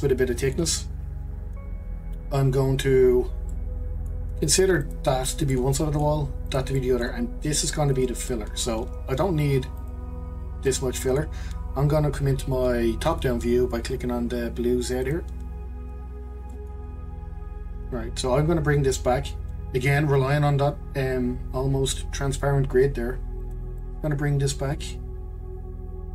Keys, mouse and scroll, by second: 1.0-2.0 scroll up 2, 2.0-3.5 scroll down 2, 3.5-4.8 middle drag, 4.8 click, 5.5 middle click, 6.5 click, 6.7 middle click, 7.6 click, 8.0 click, 8.3-9.8 middle drag, 9.8 click, 10.7 click, 11.0-14.1 middle drag, 15.0 click, 16.1-16.5 scroll up 2, 16.5-18.3 shift+middle drag, 18.3-20.7 scroll up 1, 21.6-23.8 scroll up 1, 23.8 click.